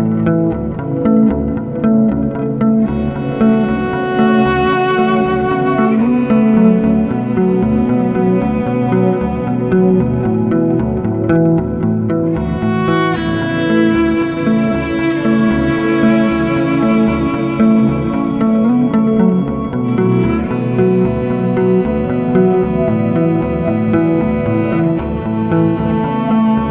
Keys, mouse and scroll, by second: 2.7-4.6 drag, 5.1 BackSpace, 8.9 click, 10.9 a, 14.9 click, 16.8 click, 17.4-19.2 drag, 20.0-23.2 drag, 23.2 Tab, 23.9 click, 24.7-26.7 middle drag.